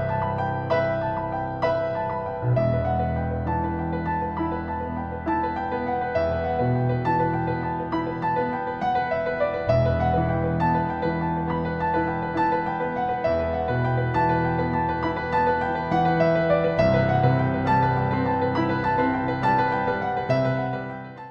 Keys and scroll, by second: 4.6 BackSpace.